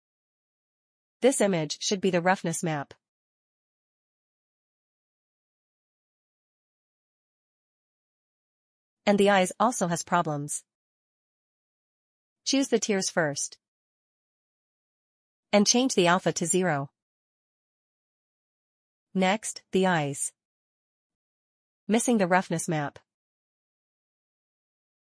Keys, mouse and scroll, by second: 1.0 click, 1.8 click, 2.2 middle click, 2.3 scroll down 1, 3.1 scroll up 1, 3.8 middle click, 3.9 middle click, 4.0 click, 5.6 click, 6.7 click, 7.3 click, 7.8 click, 8.0-8.4 scroll up 2, 8.2 shift+middle click, 8.3 shift+middle click, 8.4 middle click, 8.6 middle click, 8.6 shift+middle click, 8.9 shift+middle click, 11.5 click, 13.5 click, 14.3 middle click, 14.5 middle click, 15.1 middle click, 16.0 click, 16.3 click, 16.6 click, 19.6 middle click, 19.7 scroll down 1, 19.8 middle click, 19.9 click, 20.0 click, 20.3 click, 20.4 middle click, 20.4 middle click, 21.4 click, 22.3 click, 23.7 click.